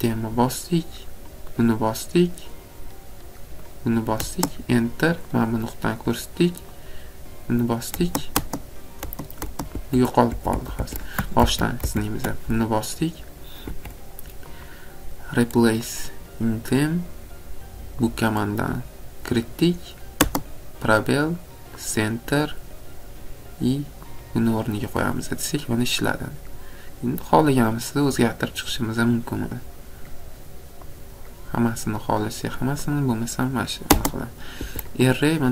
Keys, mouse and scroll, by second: 1.6 click, 3.8 click, 5.5 click, 6.9 click, 9.0 click, 9.7 Escape, 10.1 middle click, 10.3 Escape, 10.5 Escape, 10.7 Escape, 11.4 ctrl+z, 11.8 ctrl+z, 13.0 click, 13.7 Escape, 14.6 click, 16.0 click, 18.2 click, 21.9 click, 24.2 click, 27.3 click, 29.1 click, 30.8 click, 32.9 click, 34.7 Escape.